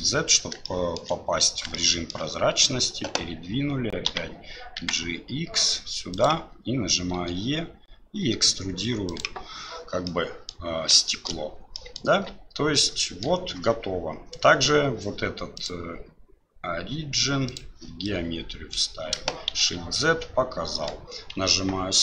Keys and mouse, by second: 0.7 shift+click, 1.8 shift+click, 9.1 e, 10.0 click, 11.1 shift+middle click, 11.7 middle click, 12.1 Tab, 13.0 shift+middle drag, 15.5-18.0 drag, 18.0-18.7 middle drag, 19.5 shift+z, 19.9-20.9 middle drag, 21.8 KP_Divide.